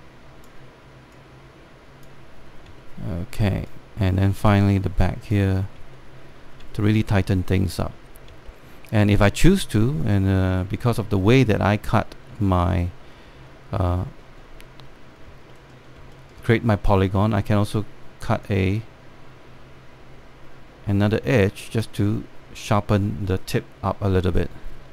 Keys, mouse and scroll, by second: 3.4 alt+middle click, 4.4-6.5 drag, 6.7 alt+middle click, 7.2 scroll down 1, 7.5 alt+middle click, 8.2 alt+middle click, 8.7 scroll up 1, 9.1 alt+middle click, 9.5 scroll up 1, 13.0-13.3 alt+scroll down 1, 13.6 scroll up 1, 13.8 scroll down 1, 14.4-15.9 scroll up 1, 16.1 alt+scroll down 1, 16.2 alt+middle click, 16.8 alt+middle click, 17.4-19.1 scroll up 1, 19.1-24.0 drag, 24.8-24.9 scroll down 1.